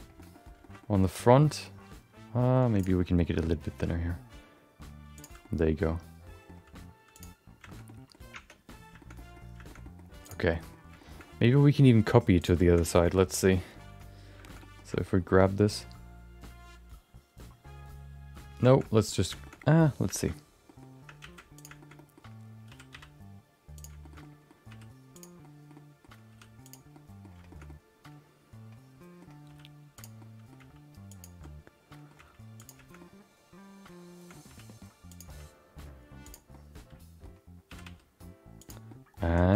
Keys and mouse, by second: 0.1 middle click, 0.3 middle click, 0.6 shift+middle click, 0.8-2.5 middle drag, 2.7 click, 3.0 middle click, 3.3 g, 5.4-6.4 middle drag, 6.5 g, 7.7 shift+middle click, 7.8 middle click, 8.6 Tab, 9.0 shift+middle click, 9.1 middle click, 9.6 shift+middle click, 9.8 middle click, 10.5 middle click, 10.9 shift+middle click, 11.1 middle click, 12.4 click, 12.8 shift+middle click, 13.0 middle click, 14.4 shift+middle click, 14.6 middle click, 14.9 shift+middle click, 15.1 middle click, 18.6 shift+middle click, 19.4 shift+middle click, 19.6 middle click, 20.1 shift+middle click, 20.6 middle click, 21.2 shift+d, 21.8 middle click, 21.9 middle click, 22.7 r, 24.0 shift+middle click, 24.2 middle click, 24.7 r, 25.4 middle click, 25.7 middle click, 26.9 middle click, 26.9 r, 27.5 shift+middle click, 27.6-29.2 middle drag, 29.4 r, 30.2 middle click, 30.6 g, 31.4 middle click, 32.2 g, 33.0-34.3 middle drag, 34.4 r, 35.3 g, 36.5 middle click, 37.7 r, 38.8 middle click, 39.4 shift+middle click.